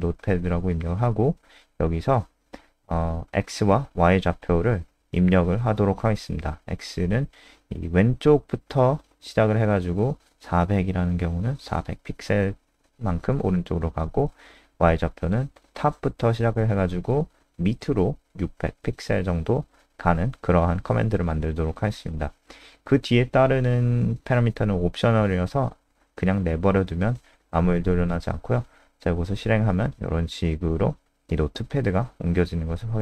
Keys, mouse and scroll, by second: 1.2 BackSpace, 1.3 BackSpace, 1.4 ,, 1.7 ,, 4.1-5.1 typing, 10.8 click, 11.6 BackSpace, 11.8 ,, 13.2-14.2 typing, 22.2 ,, 23.6 BackSpace, 23.8 BackSpace, 27.1 ctrl+s, 28.4 F5, 30.5 click, 31.7 typing.